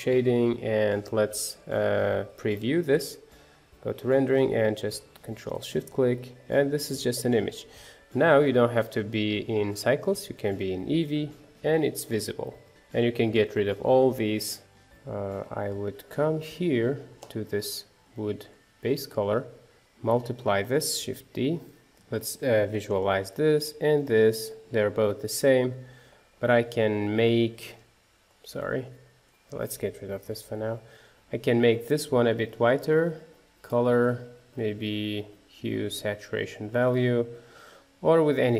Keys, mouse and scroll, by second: 3.0 z, 4.7 ctrl+shift+click, 5.5-6.0 scroll up 2, 6.0-7.2 middle drag, 7.2 scroll down 1, 7.4-10.3 middle drag, 10.3 click, 11.0-12.6 middle drag, 12.6 click, 12.7-13.9 scroll up 1, 13.9 click, 16.6-20.5 drag, 20.5 shift+d, 21.9 ctrl+shift+click, 23.2 ctrl+shift+click, 24.1-26.8 middle drag, 26.8 click, 27.9-29.2 drag, 29.7 Delete, 30.7-38.5 drag.